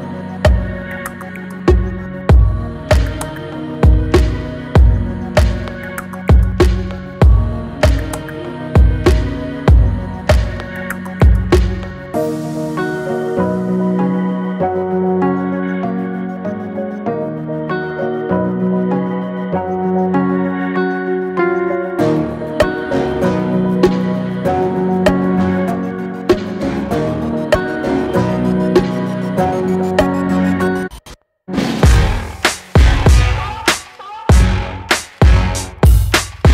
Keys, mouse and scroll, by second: 0.3-1.4 drag, 1.7 Tab, 2.1 Tab, 2.6 alt+z, 3.0-4.0 middle drag, 4.0-4.5 scroll up 2, 4.5-6.3 middle drag, 6.3-8.5 drag, 8.9 click, 9.7-11.6 middle drag, 11.6 scroll down 3, 11.8-12.2 middle drag, 12.2 Tab, 13.1 alt+z, 13.5 middle click, 13.8 scroll up 1, 13.9 click, 14.2 middle click, 15.0 shift+click, 15.5 middle click, 16.3 shift+click, 16.8 middle click, 17.4 shift+click, 17.8-19.5 middle drag, 19.5 click, 20.8 e, 23.8 middle click, 24.2-24.6 scroll up 1, 24.6-25.7 scroll down 1, 25.7 s, 26.9 ctrl+z, 27.0 ctrl+z, 27.4 click, 27.7 middle click, 28.2 shift+click, 29.6 e, 34.3 alt+middle click, 35.0 middle click, 35.8 click, 36.2 middle click.